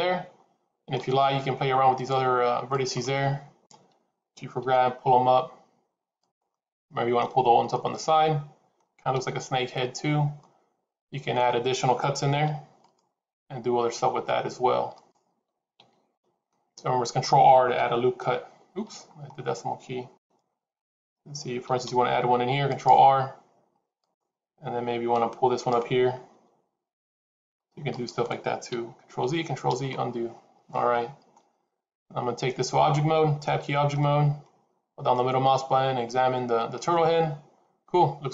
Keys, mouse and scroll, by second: 1.8 click, 2.6 shift+click, 3.5 KP_3, 4.5 g, 6.4 middle click, 9.9 shift+z, 10.2 middle click, 12.2 ctrl+r, 15.7 ctrl+z, 16.4 middle click, 17.6 KP_Decimal, 19.0-19.4 scroll down 11, 20.0 KP_3, 21.6 ctrl+r, 25.4 click, 26.2 g, 28.6 ctrl+z, 29.1 ctrl+z, 30.6 middle click, 32.0-32.4 scroll down 3, 33.5 Tab, 33.9 middle click.